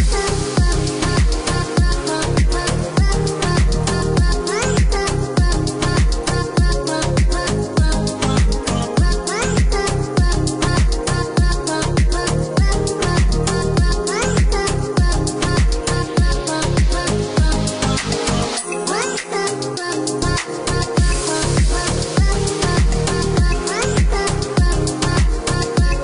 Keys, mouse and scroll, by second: 2.1 click, 6.3 click, 8.4 KP_0, 8.6 KP_Decimal, 9.1 KP_9, 10.2 KP_Enter, 14.5 click, 20.3 KP_1, 20.7 KP_Decimal, 21.0 KP_3, 22.1 KP_Enter, 24.8 click, 25.9 KP_0.